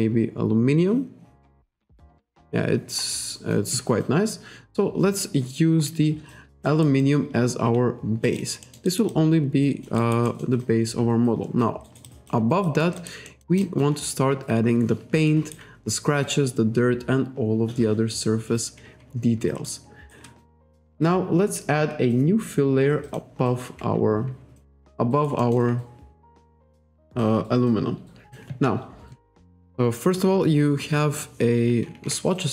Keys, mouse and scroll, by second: 1.5 click, 2.5-2.9 scroll up 1, 3.0-3.4 scroll down 1, 4.6-5.0 scroll up 1, 5.3-5.7 scroll up 1, 6.7 alt+right click, 7.0 alt+click, 8.5 alt+right click, 8.7 alt+middle click, 8.9 alt+right click, 9.1 alt+click, 10.0 alt+right click, 10.3 alt+middle click, 11.9 alt+right click, 12.1 alt+click, 12.7 alt+click, 13.3 alt+middle click, 13.7 alt+click, 15.3 alt+right click, 19.7 alt+right click, 23.1 click, 24.9 alt+right click, 25.4 alt+middle click, 32.1 alt+Tab.